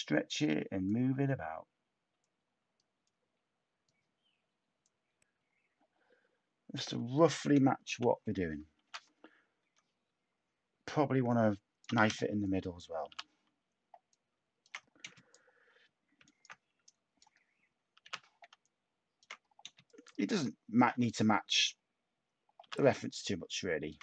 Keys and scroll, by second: 7.8 /, 8.8 k, 13.0 t, 18.0 t, 19.6 a.